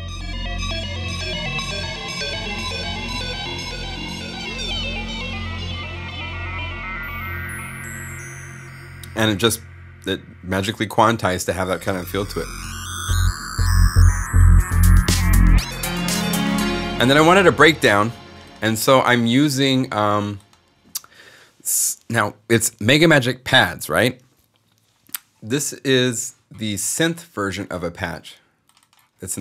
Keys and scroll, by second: 12.5 s, 16.3 space.